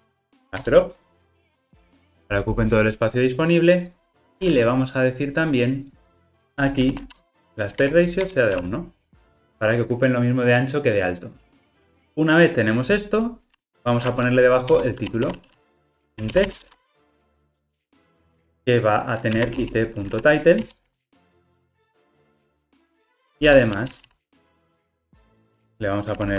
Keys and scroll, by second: 7.3 super+z, 7.9 Return, 15.9 super+z, 20.6 Return.